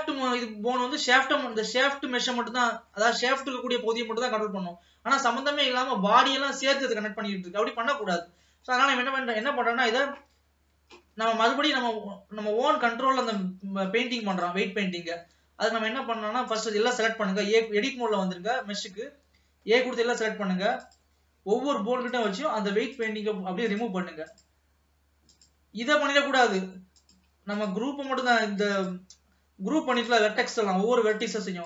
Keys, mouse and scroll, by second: 1.8 scroll up 2, 2.1-7.3 middle drag, 7.3-8.2 scroll down 2, 8.2-9.4 middle drag, 9.4 click, 11.3 ctrl+s, 15.4 ctrl+s, 15.6-16.7 scroll up 1, 16.7 a, 21.0 click, 22.2-23.3 drag, 24.0 click, 25.5-27.9 drag, 28.3 click, 30.3 click, 30.5-31.4 scroll down 1.